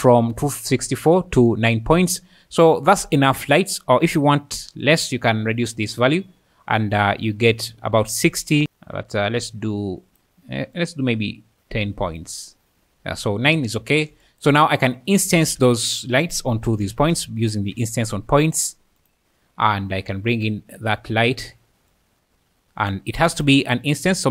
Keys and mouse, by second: 3.0-3.5 `, 4.8 click, 8.6-10.2 drag, 10.9-12.3 drag, 15.4 shift+a, 19.0 click, 21.9 click.